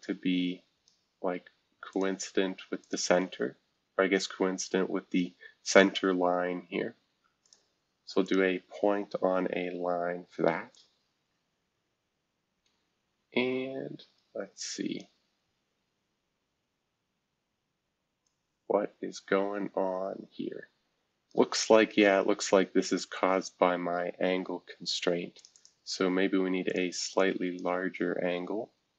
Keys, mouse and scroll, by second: 1.9 click, 2.8 ctrl+click, 7.4 click, 8.2 click, 8.8 scroll down 2, 9.3 scroll up 2, 10.7-15.0 drag, 15.4 scroll up 2, 16.6 scroll down 2, 18.2-21.3 drag, 21.7 scroll down 2, 22.3-23.2 scroll up 3, 23.2-23.9 scroll up 1, 25.3 click, 25.5 click, 26.6 click, 27.2 click.